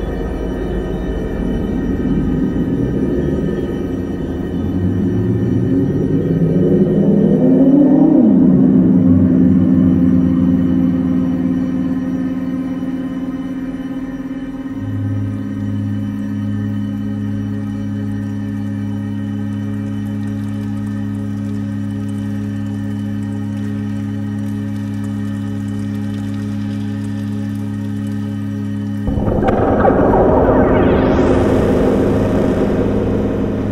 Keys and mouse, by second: 1.1-2.2 drag, 4.7 click, 5.5 click, 7.4 click, 8.2 click, 9.4 click, 10.3 click, 12.0 shift+a, 19.2-20.0 drag, 21.2 click, 21.9 click, 22.6 click, 25.8 click, 26.6 click, 28.5 click, 29.3 click, 30.5 click, 33.5 shift+a.